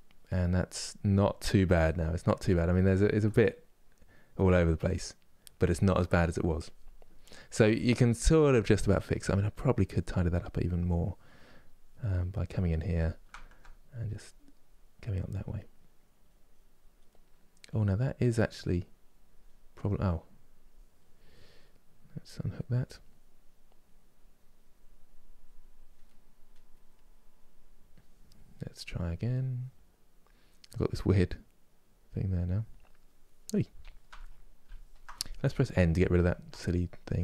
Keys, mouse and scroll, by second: 10.4 click, 11.8-13.6 middle drag, 13.6-15.2 drag, 15.2 middle click, 15.9 click, 16.8 middle click, 17.3-20.3 drag, 22.3 click, 23.5-25.7 drag, 25.7 middle click, 26.6-32.1 drag, 35.4 n, 36.7-37.2 drag.